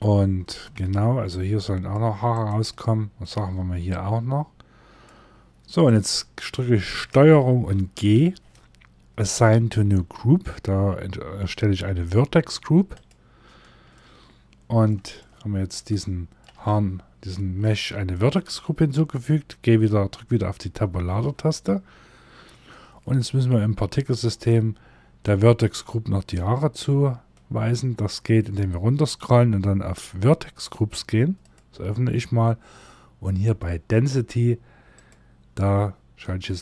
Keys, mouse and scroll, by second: 2.2 middle click, 2.9 c, 13.4 middle click, 14.7 shift+middle click, 15.4 middle click, 16.1 shift+middle click, 17.1 middle click, 20.6 Tab, 21.4 scroll down 1, 26.7 scroll up 2, 27.4 scroll down 1, 30.9 click, 31.4 scroll down 1, 34.5 click.